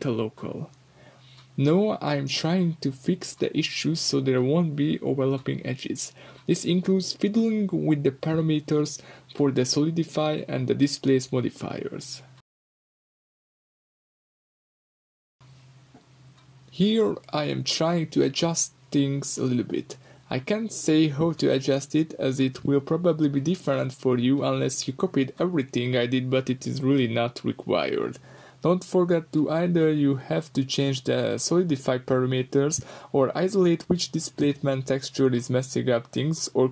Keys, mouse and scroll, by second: 0.0-5.1 middle drag, 0.2 g, 1.0 click, 1.4 KP_7, 1.9 g, 3.0 click, 3.4 scroll down 2, 5.1 click, 5.1 middle drag, 5.3-6.3 middle drag, 6.3 drag, 6.4-7.9 middle drag, 6.6-7.9 scroll up 2, 7.9-13.0 shift+drag, 9.4-10.5 scroll down 2, 13.0-16.0 middle drag, 14.0 scroll down 2, 15.1 scroll up 2, 16.0 click, 16.7-18.3 drag, 18.0 Return, 18.3-20.1 middle drag, 20.1-21.3 drag, 21.0 Return, 21.3-25.0 middle drag, 25.0-26.3 drag, 25.7 Return, 26.3-30.1 middle drag, 30.1-36.7 drag, 31.3 Return, 34.3 Return, 36.3 Return.